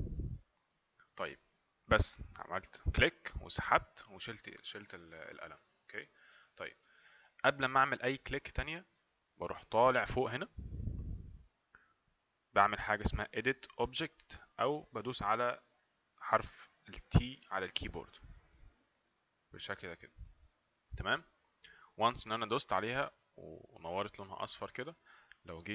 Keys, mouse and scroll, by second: 18.8 click.